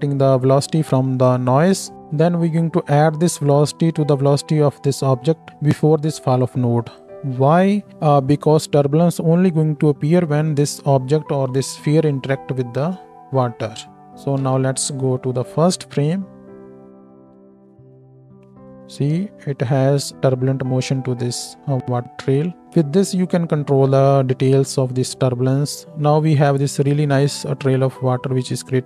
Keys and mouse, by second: 6.9-28.8 drag, 14.6 shift+Left, 15.8 space, 26.6 space, 27.1 space.